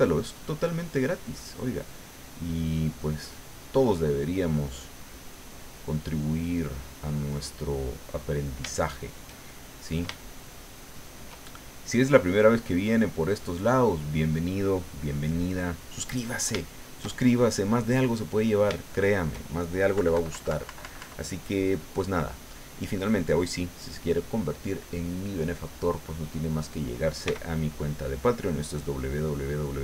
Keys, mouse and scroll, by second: 0.2-5.5 drag, 5.8-8.4 middle drag, 8.5 shift+middle click, 9.4 shift+middle click, 10.2-11.3 shift+middle drag, 11.9-14.9 drag, 15.1 click, 16.2 middle click, 16.7-17.7 shift+middle drag, 18.0 shift+middle click, 18.8 shift+middle click, 19.9 KP_Subtract, 23.2-26.0 middle drag, 27.2 f, 27.9 click, 28.4-29.5 drag.